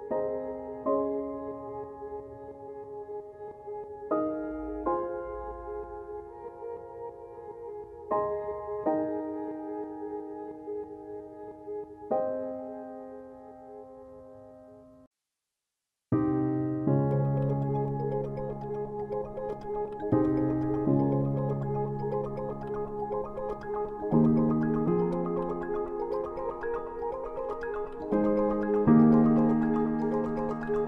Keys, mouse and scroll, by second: 5.2 click, 13.6 click.